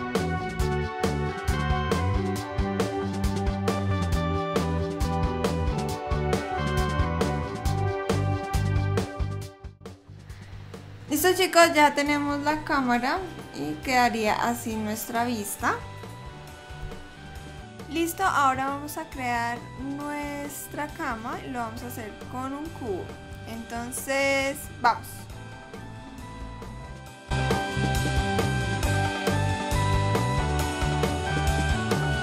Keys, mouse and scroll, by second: 0.2 click, 0.5 click, 2.6 click, 2.8 click, 3.1 g, 4.1 g, 4.6 r, 5.5 r, 6.8 g, 7.5 r, 8.5 click, 9.7 click, 10.3 KP_0, 10.4 scroll down 3, 12.8 KP_0.